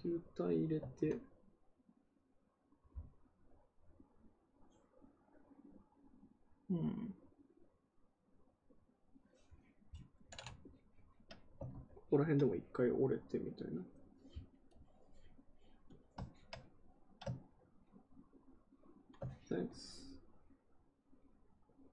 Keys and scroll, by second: 11.6 ctrl+z, 19.2 ctrl+z.